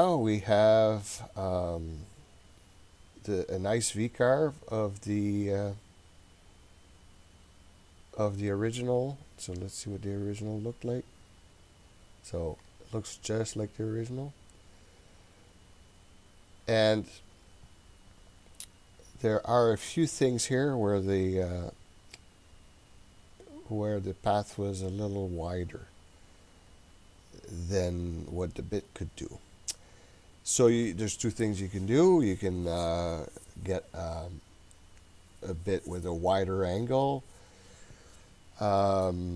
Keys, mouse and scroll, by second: 10.5 click, 12.6 click, 13.2 click, 14.1 click, 15.3 click, 15.8 click.